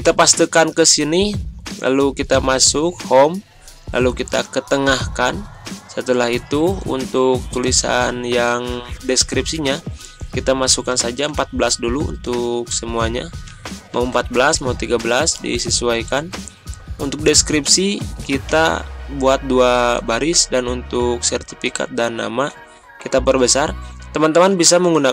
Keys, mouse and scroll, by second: 6.7 click, 11.2 a, 12.2 click, 13.4-13.9 typing, 14.3 Return, 16.1 click, 18.2 BackSpace, 18.5 Return, 19.9-25.1 drag.